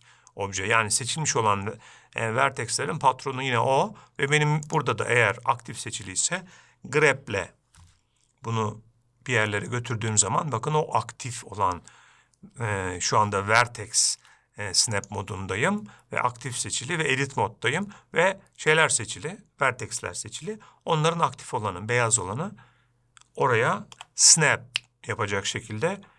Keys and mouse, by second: 5.1-6.4 drag, 7.4 g, 15.5-17.3 drag, 24.4 g.